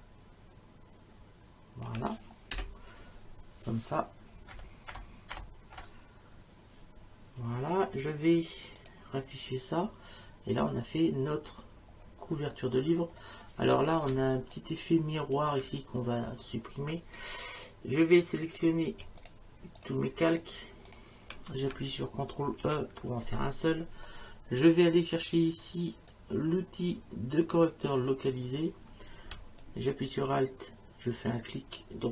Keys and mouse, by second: 2.5 Return, 2.5 KP_Enter, 4.5 Right, 8.8 click, 14.1 space, 14.5 click, 18.4 click, 19.2 click, 22.6 ctrl+e, 26.1 click, 29.6 right click.